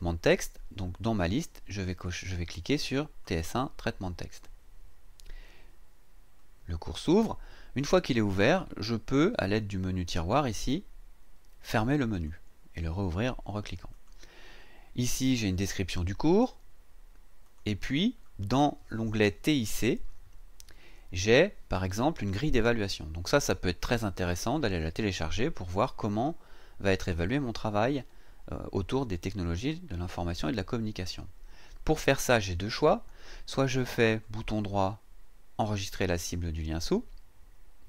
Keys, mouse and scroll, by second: 3.2 click, 10.5 click, 12.1 click, 13.9 click, 17.4 click, 20.7-21.2 scroll down 1, 34.1 right click.